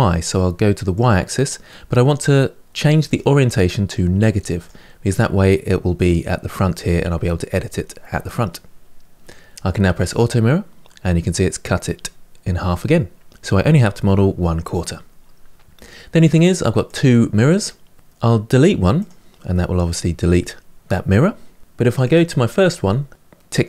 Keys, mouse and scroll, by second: 0.7 click, 2.8-4.8 drag, 4.8-7.8 middle drag, 9.8 click, 16.0 click, 16.6 click, 18.7 click, 19.2-20.8 middle drag, 21.8 click, 23.4 click.